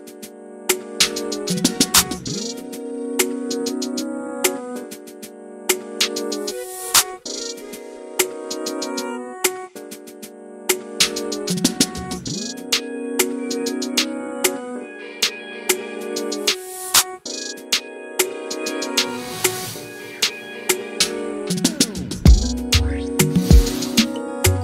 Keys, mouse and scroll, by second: 0.2 a, 0.5 s, 1.2 s, 2.1 click, 2.4 click, 3.3 scroll down 1, 3.4-3.9 scroll up 1, 3.9 a, 4.2 right click, 4.6 s, 6.0 click, 6.3 s, 8.0-8.4 click, 8.2 click, 8.7 click, 8.7 click, 10.4 click, 10.5 s, 11.3 scroll down 1, 11.4 Tab, 11.6 alt+a, 11.8 click, 11.9 Tab, 12.1 click, 12.4 s, 13.5 click, 13.8 click, 14.0 s, 15.1 click, 15.3 s, 15.7 scroll down 2, 15.7 Tab, 15.9 alt+a, 16.0-16.4 middle drag, 16.4 click, 16.6 middle click, 16.8 scroll up 2, 16.8 Tab, 17.1 a, 17.4 s, 18.1 Tab, 18.3 alt+a, 18.3-19.5 middle drag, 19.5 click, 23.4 s, 24.2 Tab, 24.4 alt+a, 24.5 middle drag.